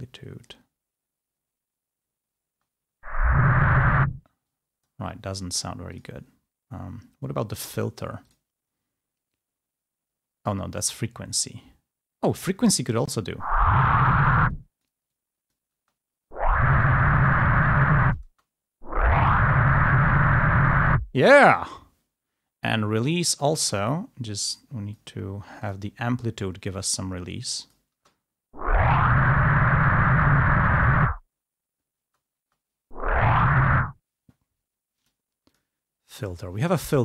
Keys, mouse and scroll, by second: 2.6 space, 4.3 space, 4.7 click, 6.0 click, 7.6 click, 8.4 click, 10.8 click, 12.3 click, 13.1 space, 14.5 click, 14.5 space, 15.3 click, 15.8 space, 17.4 click, 17.4 space, 18.3 space, 21.1 space, 21.7-23.4 drag, 23.6-25.2 drag, 25.7 click, 26.7-28.0 drag, 28.1 space, 32.1 space, 33.9 space, 35.0 click, 35.5 click.